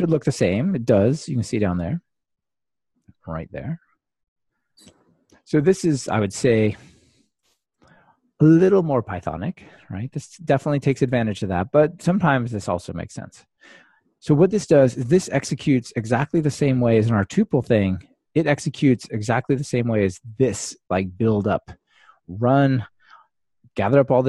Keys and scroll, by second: 7.8 alt+super+l.